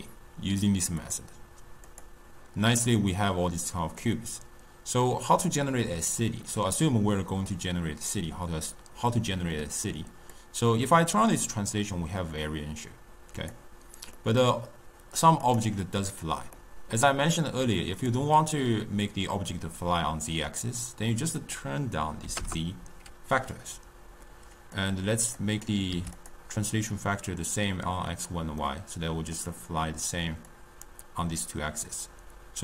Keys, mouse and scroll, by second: 0.9 click, 1.8 click, 4.0-8.4 middle drag, 10.2-13.2 drag, 14.1-15.4 middle drag, 15.4 click, 16.5-17.9 middle drag, 17.9 click, 21.3-24.4 drag, 24.6-26.2 drag, 28.5-30.4 middle drag, 30.4-32.6 drag.